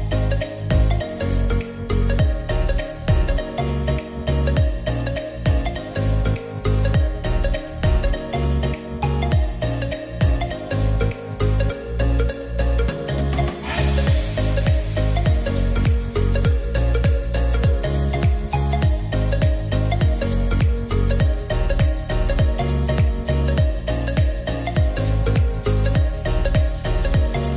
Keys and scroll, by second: 17.1 0, 17.2 Return, 18.4 r, 21.1 e.